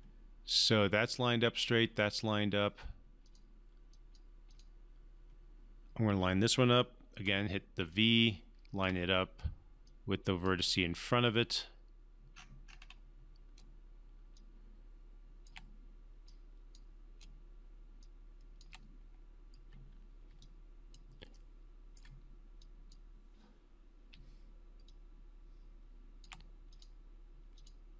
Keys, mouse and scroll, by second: 3.2 click, 7.2-8.8 typing, 7.9 click, 9.8-10.5 drag, 11.4 scroll down 1, 12.3 scroll, 12.3-13.6 scroll up 1, 13.6 v, 14.0 v, 14.3-15.5 click, 15.1 v, 15.2 v, 15.4 v, 15.5 v, 16.2-16.9 click, 17.2-18.6 typing, 18.0 click, 20.4-21.0 alt+click, 21.3-21.9 alt+middle click, 22.6 alt+click, 24.1 alt+v, 26.7 alt+click.